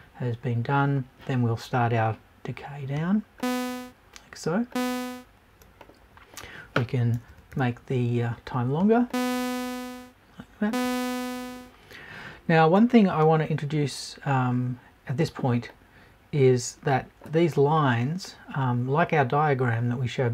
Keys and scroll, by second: 7.2 BackSpace.